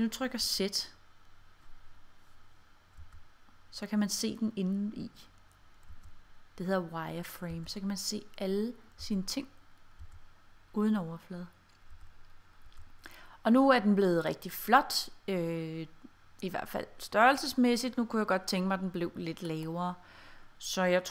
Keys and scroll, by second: 0.5 z, 3.0 z, 6.0 z, 7.6 z, 9.1 z, 10.1 z, 12.0 z, 12.7 z.